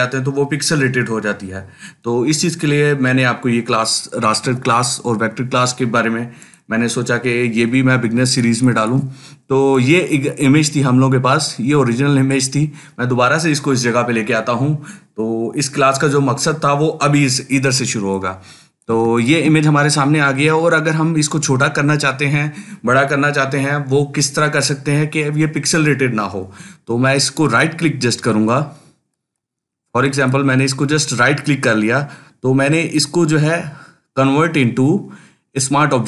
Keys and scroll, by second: 4.2 Delete.